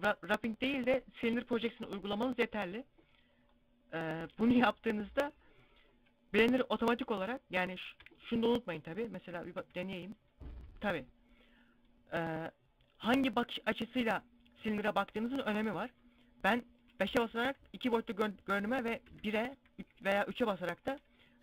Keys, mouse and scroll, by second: 2.3-3.2 scroll down 2, 3.2 scroll up 1, 6.2 scroll up 3, 6.9 scroll down 1, 8.0 middle click, 9.3 u, 11.5 middle click, 16.0 KP_5, 18.5 KP_1.